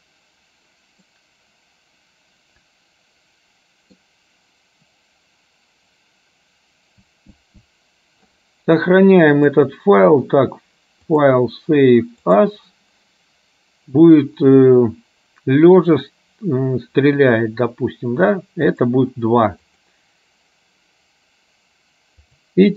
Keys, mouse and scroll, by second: 1.2-4.1 middle drag, 9.6 click, 11.2-12.7 drag, 22.4-22.7 drag.